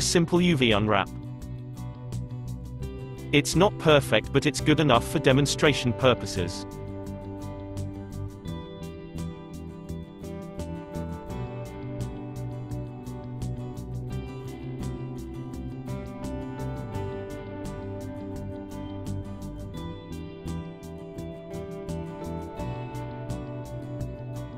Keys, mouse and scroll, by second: 2.5 Left, 6.3 1, 7.7 3, 8.4 click, 9.3 l, 11.6 g, 15.6 a, 16.5 g, 19.1 s, 22.2 s, 23.2 Tab, 23.9 middle click.